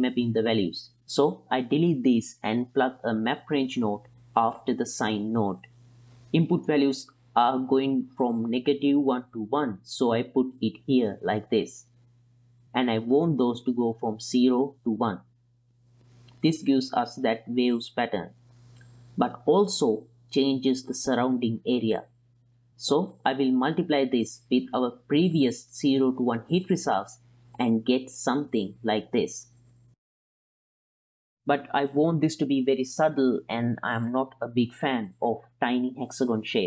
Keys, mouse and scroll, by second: 0.6 click, 1.2 ctrl+x, 1.5 click, 2.0 ctrl+x, 2.4 click, 3.3-5.7 drag, 6.0 ctrl+shift+click, 6.4 click, 7.3 ctrl+click, 8.5-10.1 drag, 11.0 ctrl+click, 12.1 click, 16.3-20.1 drag, 22.2 click, 22.7-23.6 middle drag, 23.9 drag, 24.3-24.7 drag, 25.1-26.4 drag, 26.6 click, 27.0 click, 27.7-28.1 drag, 28.4 click, 28.9 ctrl+shift+click, 29.2-31.5 drag, 32.2 click, 33.1-33.7 drag, 33.9 click, 35.0 ctrl+click, 36.2 ctrl+click, 36.5 click.